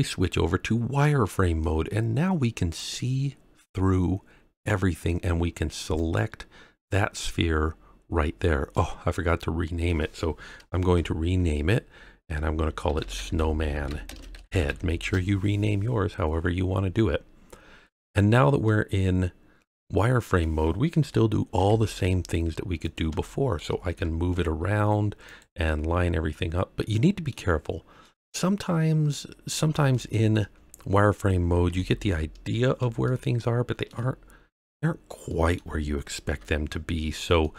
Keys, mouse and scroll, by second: 0.2-0.5 scroll down 2, 1.2 scroll up 1, 1.6-5.1 middle drag, 5.9 click, 7.6-8.2 scroll up 2, 8.2 scroll down 2, 8.7-9.8 middle drag, 10.9 F2, 17.6-18.2 scroll down 1, 18.2-18.6 scroll up 1, 18.6-20.4 middle drag, 21.5 g, 22.8 click, 23.2-23.5 shift+middle drag, 23.8 g, 23.9 z, 25.2 click, 25.6-27.3 middle drag, 27.6-28.0 scroll up 1, 28.0-29.1 middle drag, 29.4 scroll down 1, 29.9-30.3 shift+middle drag, 31.6 KP_3, 33.0-33.9 shift+middle drag, 34.0-34.7 scroll down 4, 34.7-35.2 scroll up 2, 35.2-35.5 middle drag, 36.3 Home, 37.4-37.5 middle drag.